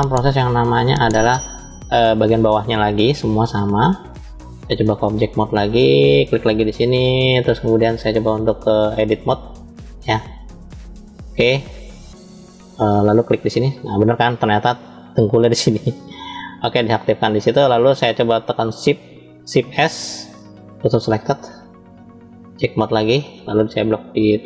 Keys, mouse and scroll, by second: 0.0 shift+middle click, 2.7 middle click, 4.8-5.5 drag, 6.0 click, 7.7-12.2 drag, 15.8 alt+click, 19.6 shift+s, 22.2-22.9 drag, 24.3 click.